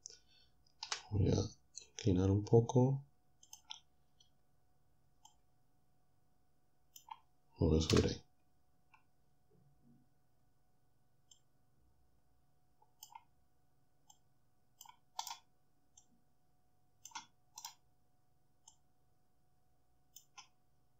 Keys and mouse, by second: 0.9 r, 3.5 click, 5.3-7.9 drag, 7.9 0, 11.5-13.2 drag, 14.1 click, 15.3 right click, 16.0-17.3 drag, 17.7-20.3 drag.